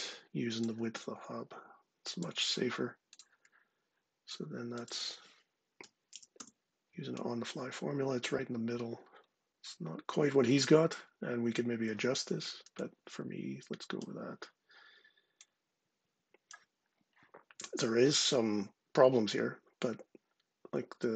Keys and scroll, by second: 5.4-6.0 typing.